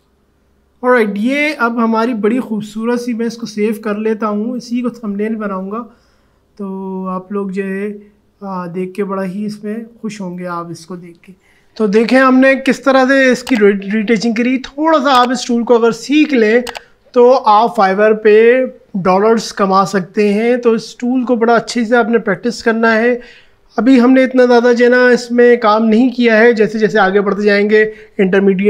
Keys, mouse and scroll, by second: 0.7-1.0 alt+scroll down 1, 3.3 click, 10.3 click.